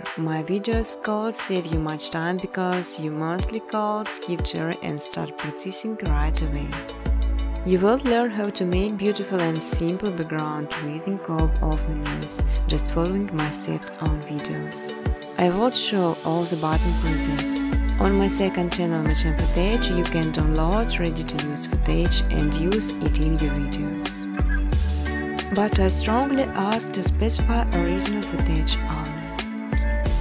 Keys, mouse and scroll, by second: 0.0-1.0 typing, 2.7-4.1 typing, 3.7 click, 5.3 space, 5.8 space, 6.3 space, 7.9 click, 9.9 click, 12.0-12.4 typing, 13.5-15.6 typing, 15.9 Return, 18.7 click, 18.7-22.2 typing, 23.9 Return, 24.7 space, 25.6 space, 28.6 click.